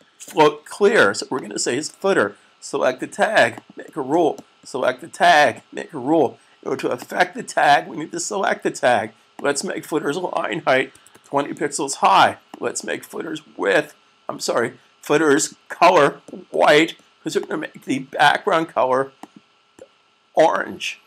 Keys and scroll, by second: 10.9 typing, 13.2 typing.